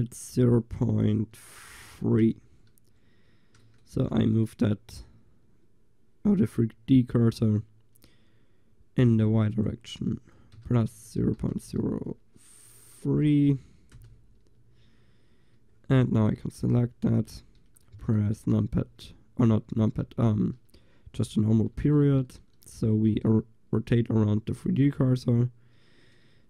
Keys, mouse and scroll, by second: 2.6-3.7 middle drag, 9.2-12.6 drag, 15.4-17.2 middle drag, 17.2 click, 17.2 l, 18.6 ., 21.2 click.